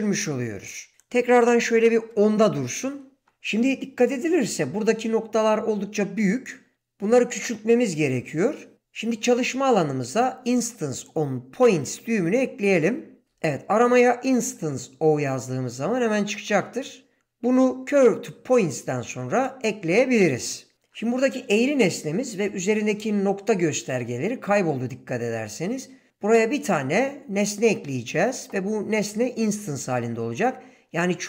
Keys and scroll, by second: 1.4-2.4 typing.